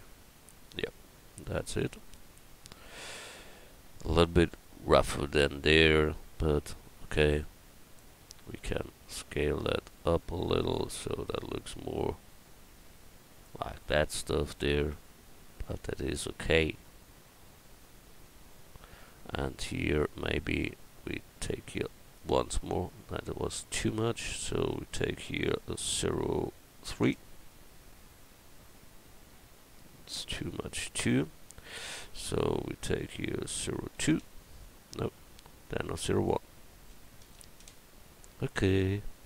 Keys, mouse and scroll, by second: 2.4 a, 7.3 Tab, 9.0 a, 9.4 s, 14.9 Tab, 15.4 middle click, 15.6 middle click, 15.8 middle click.